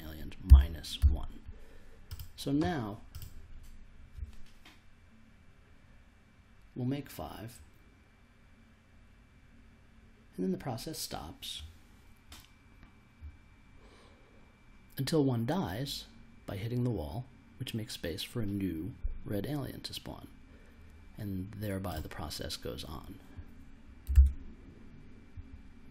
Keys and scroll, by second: 0.5 -, 1.0 1, 24.1 super+s.